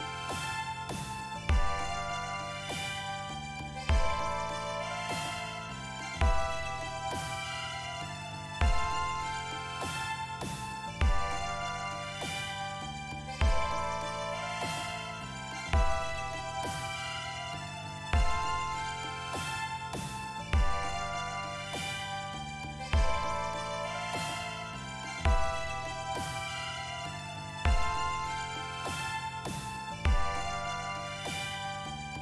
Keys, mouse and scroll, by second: 1.1 click, 11.1 click, 16.5 click, 17.9 click, 20.8 click, 22.6-23.8 drag, 26.1 click.